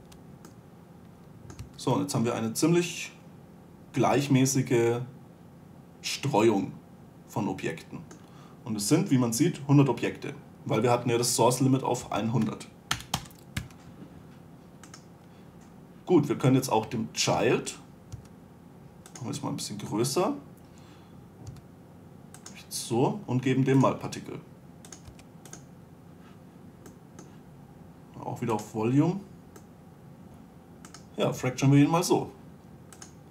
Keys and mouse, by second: 0.4 2, 2.0 a, 6.1-12.2 middle drag, 12.5 a, 13.2 Delete, 14.0 1, 16.5 click, 18.5 s, 19.7-21.7 drag, 21.9 s, 24.2-27.0 drag, 27.3-30.1 drag, 30.3 s, 31.3-33.2 middle drag.